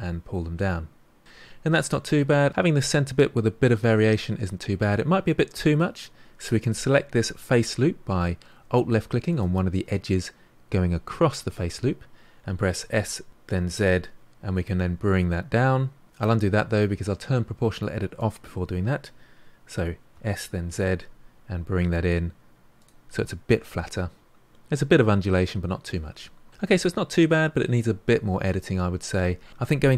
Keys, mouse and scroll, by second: 1.2-2.5 middle drag, 3.7-6.9 middle drag, 9.3 alt+click, 12.7 s, 18.1 click, 20.1 s, 23.1-26.3 middle drag, 26.5-27.8 middle drag, 27.8-28.6 scroll up 4, 28.6 middle click, 29.0-29.5 scroll up 1.